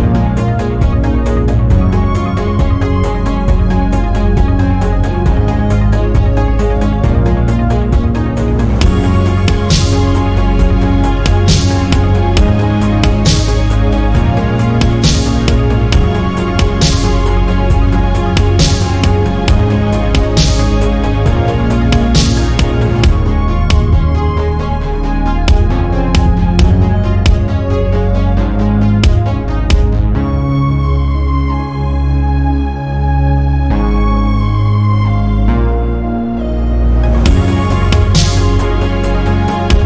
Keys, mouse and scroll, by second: 0.1-0.5 shift+middle drag, 1.3 Tab, 4.8 g, 9.2 click, 10.4 g, 12.9 g, 14.1-14.6 scroll up 1, 14.6 s, 16.0 Tab, 16.4 drag, 16.7 click, 17.0-18.6 scroll down 1, 18.6 scroll down 8, 19.5 /, 20.1-20.9 scroll down 10, 20.9-22.1 middle drag, 22.1 click, 22.4 scroll up 5, 23.0 KP_1, 23.5-24.0 scroll up 1, 24.0 scroll down 4, 24.5-25.7 shift+middle drag, 25.7 scroll up 3, 26.1-26.7 shift+middle drag, 26.7 click, 27.3 Tab, 27.5 scroll up 2, 28.0 alt+z, 28.3 shift+scroll up 1, 28.4 shift+middle click, 29.0 click, 30.4 g, 33.5 click, 33.8 Tab, 34.0-34.5 scroll down 7, 34.7-35.0 scroll up 6, 35.2 click, 35.5 scroll up 1, 35.7 click, 36.3 alt+z, 36.5 scroll down 1, 36.6-37.0 middle drag, 37.0-37.5 scroll up 1, 37.5 Tab, 37.9 shift+middle click, 38.3-39.0 scroll up 1, 39.0-39.8 middle drag.